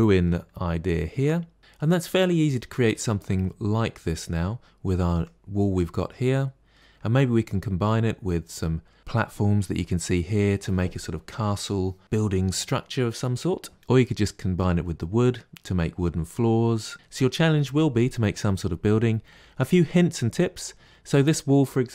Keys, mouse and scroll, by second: 0.4 scroll up 3, 0.8-3.1 shift+middle drag, 4.2-5.0 middle drag, 5.0 click, 5.7-7.0 middle drag, 7.0 scroll down 2, 7.4-9.0 middle drag, 16.9 middle click, 19.6-20.4 middle drag, 20.4-21.9 scroll up 1.